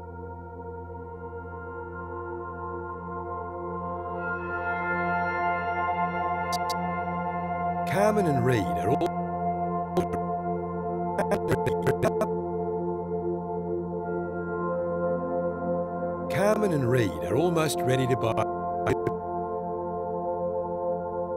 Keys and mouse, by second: 1.4 click, 2.3 shift+click, 3.4-5.9 drag, 6.5 click, 7.0 space, 8.8 space, 9.9-12.7 drag, 13.7 ctrl+s, 14.7 click, 15.0-15.6 drag, 15.4 space, 18.8-19.6 drag.